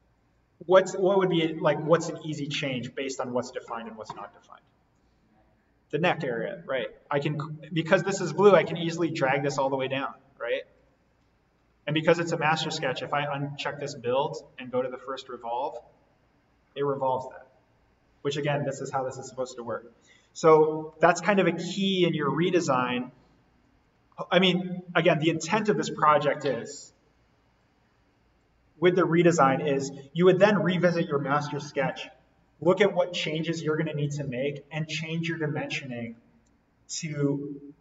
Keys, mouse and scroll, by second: 8.6-17.7 drag, 20.9 click, 21.0 ctrl+z, 22.3 z, 23.8 right click, 24.9 click.